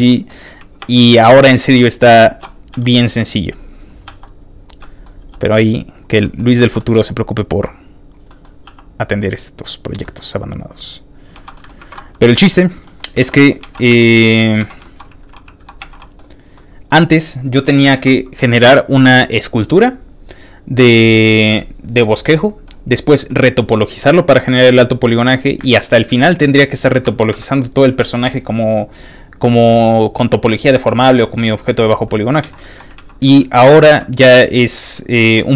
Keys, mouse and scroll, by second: 0.1 ctrl+middle click, 0.8 shift+space, 2.7 space, 2.8 shift+click, 3.0 shift+click, 3.3 shift+click, 3.6 shift+click, 3.7 shift+click, 4.0 f, 4.2 shift+click, 4.3 click, 4.5 click, 4.8 middle click, 5.2 f, 5.3 click, 5.5 click, 5.9 click, 6.2 middle click, 6.5 shift+middle click, 6.8 shift+middle click, 7.2 shift+click, 7.5 shift+click, 7.7 shift+click, 7.9 shift+click, 8.3 shift+middle click, 8.6 f, 8.7 click, 8.9 click, 9.1 click, 9.4 click, 9.6 click, 10.0 middle click, 10.6 click, 11.0 click, 11.3 shift+middle click, 11.5 middle click, 11.8 ctrl+Tab, 12.0 middle click, 12.0 scroll down 1, 12.2 shift+middle click, 12.5 shift+middle click, 12.8 shift+middle click, 13.3 alt+shift+z, 13.3 alt+shift+middle click, 13.6 alt+shift+z, 13.9 q, 14.8 z, 14.8 shift+middle click, 15.8 alt+z, 16.0 alt+middle click, 16.3 click, 16.5 middle click, 17.9 shift+middle click, 18.1 shift+click, 20.9 shift+middle click, 22.2 shift+middle click, 22.8 shift+click, 23.3-25.3 shift+middle drag, 25.8 middle click, 26.2 scroll down 2, 26.4 middle click, 26.8 scroll up 2, 27.0 shift+middle click, 27.5 scroll down 3, 30.8 middle click, 31.1 scroll up 2, 32.4 alt+shift+z, 32.6 shift+middle click, 32.8 scroll up 1, 32.9 middle click, 32.9 alt+z, 33.4 shift+middle click, 33.6 alt+z, 33.8 shift+middle click, 34.7 middle click, 35.1 middle click.